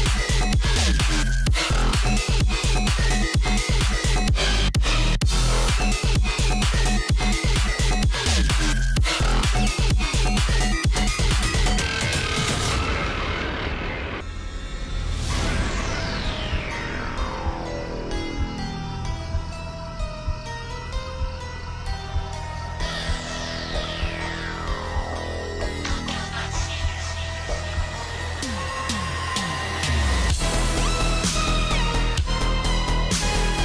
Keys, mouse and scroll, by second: 0.8-1.4 alt+scroll down 1, 1.5 space, 1.7 click, 5.3 click, 7.3 click, 8.2-8.8 scroll down 1, 8.8 click, 10.7-11.2 scroll down 1, 11.2-11.7 scroll up 1, 11.7-15.0 drag, 15.2-17.8 drag, 17.8-18.6 scroll down 1, 18.6-23.3 drag, 23.3-24.2 scroll down 1, 24.2-33.6 drag.